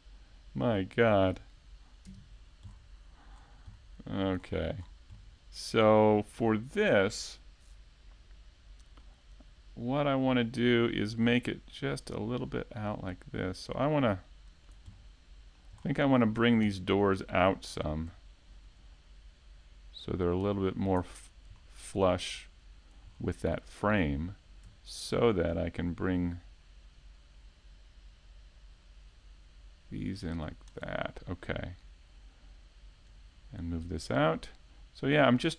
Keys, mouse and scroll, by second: 0.4 middle click, 3.2 alt+shift+right click, 3.9 click, 6.3 middle click, 7.7 scroll up 1, 8.0 alt+shift+middle click, 8.7 middle click, 10.3 alt+right click, 11.1 click, 12.0 middle click, 13.2-13.8 scroll down 2, 13.6 alt+middle click, 13.9-14.4 scroll up 3, 14.3 alt+middle click, 15.7 KP_Decimal, 16.3-17.0 scroll down 8, 17.3 shift+middle click, 17.3 scroll down 3, 17.8 ctrl+Tab, 21.7 right click, 22.1 middle click, 25.0 middle click, 33.2 alt+right click, 33.6 middle click, 34.9 shift+d.